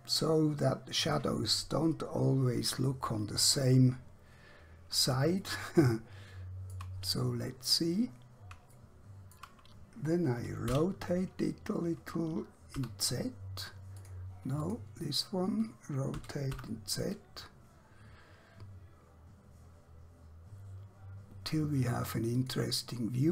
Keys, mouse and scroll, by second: 1.1 click, 3.7 scroll up 1, 4.1-5.1 scroll down 1, 5.4 shift+middle click, 7.1-7.5 scroll up 1, 8.1-8.6 scroll down 1, 8.9 shift+middle click, 10.7 r, 12.7 z, 14.0 click, 16.2 r, 16.6 z, 22.5 click.